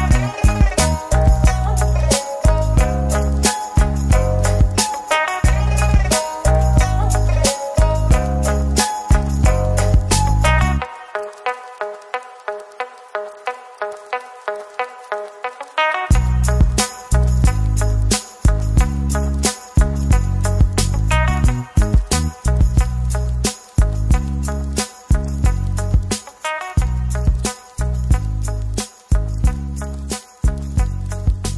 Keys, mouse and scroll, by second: 3.5 shift+click, 4.2 typing, 5.5 middle click, 6.2-6.6 scroll down 1, 6.8 middle click, 10.7-11.6 typing, 12.3 middle click, 14.1 middle click, 17.7 right click, 20.6 typing, 22.0 typing, 23.0 Tab, 23.2 middle click, 24.8 ctrl+z, 25.5 ctrl+z, 26.1-27.7 typing, 28.0 Tab, 28.3 middle click, 29.0 right click, 30.4 double click, 30.7 right click.